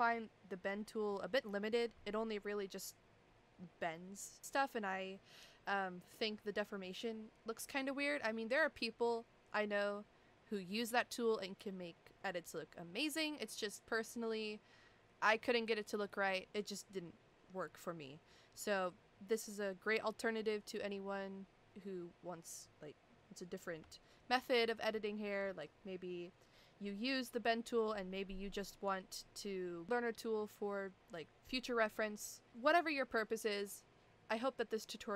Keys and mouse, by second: 24.4 F12, 28.8 click.